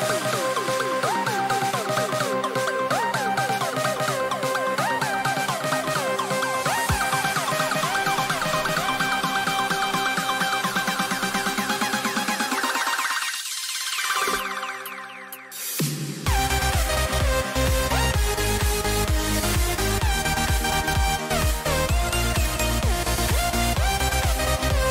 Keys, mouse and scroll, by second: 17.3-19.4 middle drag, 21.0-22.0 middle drag, 22.0-24.4 right drag, 24.4-24.9 drag.